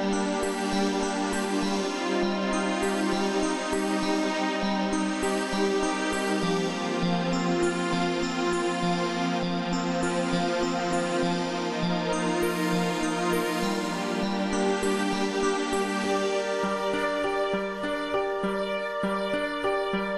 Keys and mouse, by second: 0.3 click, 1.7 click, 3.6 click, 5.4 click, 7.0 click, 8.6 click, 9.8 click, 12.8 click, 15.9 click, 17.0 click, 19.4 click.